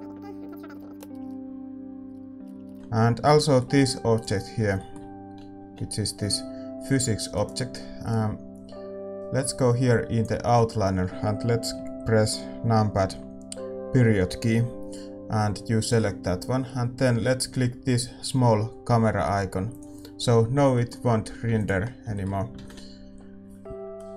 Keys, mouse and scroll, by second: 0.4 r, 0.4 g, 2.1-3.3 drag, 2.1 shift+z, 2.4 ctrl+s, 2.4-19.6 middle drag, 2.6 shift+z, 4.2-19.6 right drag, 5.7 g, 19.6-21.7 drag, 20.4-24.1 middle drag, 21.7 ctrl+s, 21.7 a, 23.6 shift+z.